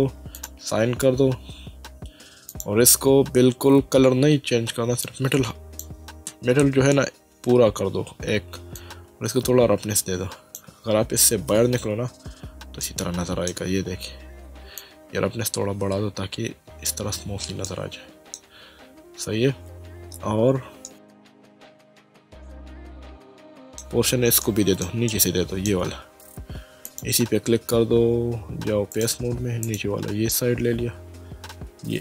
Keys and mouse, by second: 0.4 click, 2.5 click, 5.0 click, 8.7 click, 11.5 Tab, 12.8 middle click, 14.8 click, 17.7 middle click, 20.8 shift+middle click, 22.5 Tab, 23.3 middle click, 24.4 shift+middle click, 26.8 click, 28.9 click.